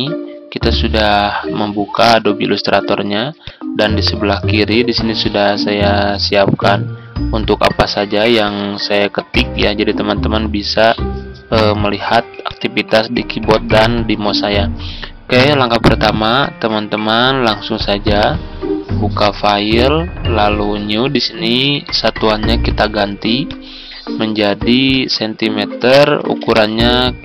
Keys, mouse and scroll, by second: 5.9-14.5 drag, 25.9-26.8 typing.